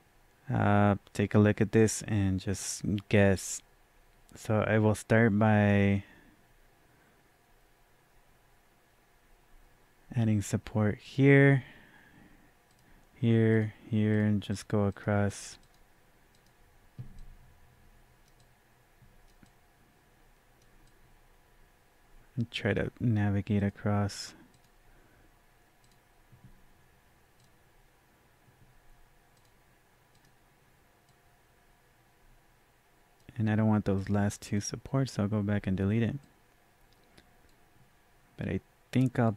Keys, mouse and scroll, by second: 18.4 double click, 19.4-39.3 drag, 31.3-33.2 drag.